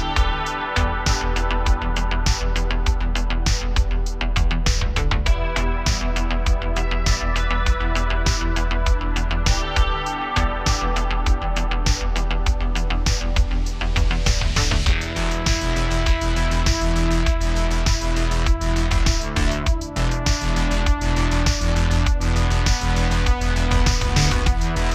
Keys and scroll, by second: 0.2 super+z, 0.6 space, 2.5 super+z, 2.8 super+z, 3.0 space, 4.1-4.8 typing, 6.2 typing, 8.1 typing, 11.8 BackSpace, 13.0 typing, 15.3-17.4 typing, 21.2 space, 22.0 space.